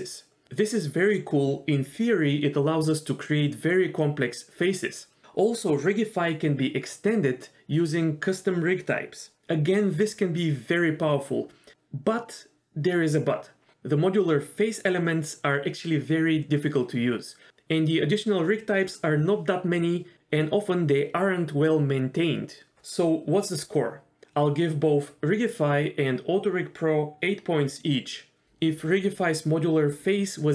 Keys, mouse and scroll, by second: 4.5-5.8 drag, 24.0-24.5 scroll up 1, 24.6-30.5 drag.